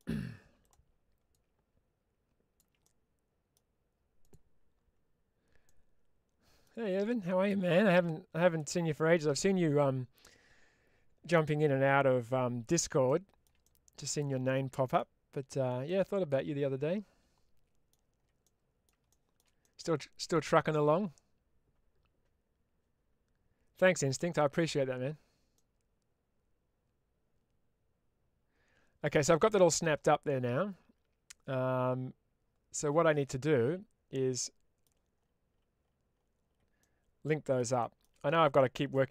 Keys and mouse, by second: 0.5 click, 1.2-2.4 ctrl+drag, 2.7 middle click, 4.1 click, 5.5 middle click, 7.1-8.4 drag, 8.9 middle click, 12.9 shift+middle click, 13.5-14.8 middle drag, 15.7-17.8 middle drag, 18.4 middle click, 19.0 shift+middle click, 19.5 middle click, 25.4-29.0 middle drag, 29.7-34.7 middle drag, 36.7 middle click, 37.7 shift+middle click, 38.8 shift+middle click.